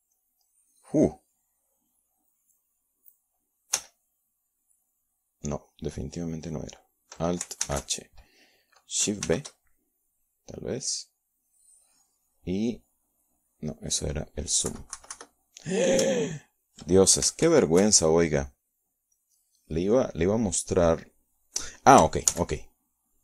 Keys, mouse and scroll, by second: 3.6 alt+h, 5.2 shift+b, 7.2-9.0 drag, 10.7 KP_Subtract, 12.2 shift+click, 13.5 alt+b, 15.2-16.7 drag, 18.3 ctrl+z, 22.2 alt+h.